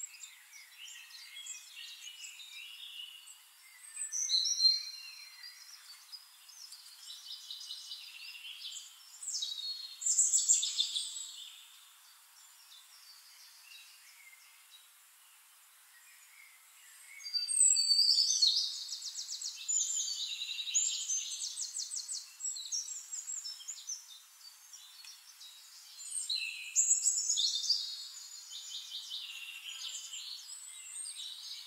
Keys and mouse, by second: 1.4 shift+click, 2.9-3.8 drag, 5.2 click, 5.9 shift+click, 7.0 click, 8.4-9.3 drag, 9.6 click, 10.4 drag, 11.0 click, 11.8 click, 12.4 click, 13.5 click, 14.2 click, 15.9 click, 16.8 click, 17.1 ctrl+click, 18.8 click, 19.7-21.4 ctrl+drag, 22.2 drag, 22.5 drag, 23.4 click, 24.2 click, 26.2-31.6 typing.